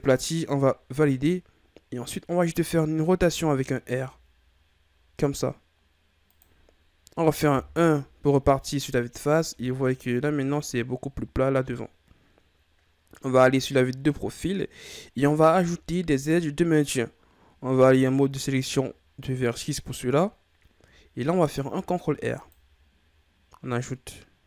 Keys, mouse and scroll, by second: 3.2 r, 7.5 KP_1, 9.1-9.5 scroll down 3, 9.5 Tab, 13.2 KP_3, 14.5-15.4 scroll up 3, 15.4 Tab, 17.6 ctrl+Tab, 21.7 ctrl+r.